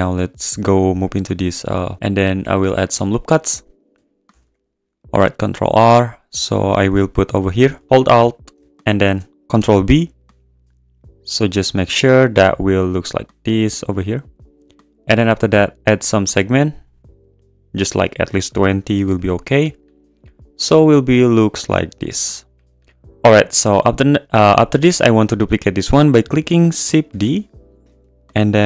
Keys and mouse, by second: 1.1 click, 3.6 click, 4.3 ctrl+r, 4.5 click, 7.7 g, 7.8 z, 8.0 alt+click, 9.5 ctrl+b, 13.9 click, 15.9-17.8 drag, 17.9-19.2 drag, 27.1 shift+d.